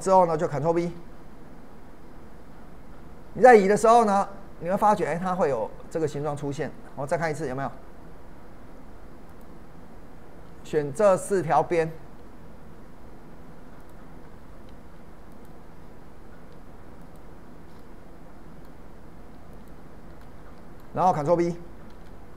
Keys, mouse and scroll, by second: 0.8 ctrl+b, 9.3 click, 10.7 middle click, 11.6-12.1 scroll down 2, 12.1-12.5 scroll up 1, 13.8 click, 15.3 ctrl+click, 17.8-19.5 middle drag, 19.5 ctrl+click, 20.2-21.9 ctrl+middle drag, 21.9 ctrl+b.